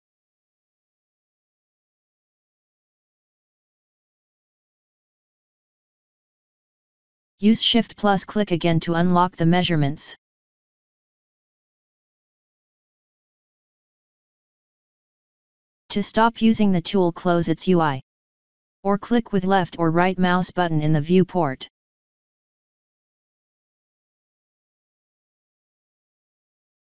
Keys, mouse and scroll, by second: 0.6 click, 3.0 click, 4.1 click, 10.8 shift+click, 17.3 click, 18.1 click, 19.8 right click, 21.5 click, 26.5 click.